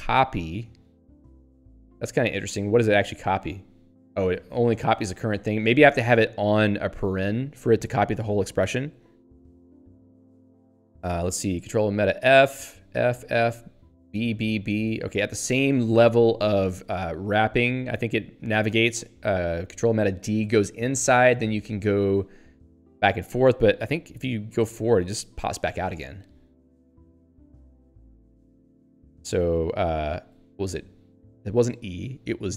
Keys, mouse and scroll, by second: 1.3 scroll up 1, 2.6 click, 2.7 click, 3.4 ctrl+y, 4.5 BackSpace, 5.4 Delete, 11.6 ctrl+alt+f, 13.7 ctrl+alt+b, 15.1 ctrl+alt+f, 16.6 ctrl+alt+b, 19.6 ctrl+alt+d, 20.8 ctrl+alt+f, 25.4 ctrl+alt+b, 26.9 ctrl+alt+f, 28.3 ctrl+alt+b, 30.3 ctrl+alt+e.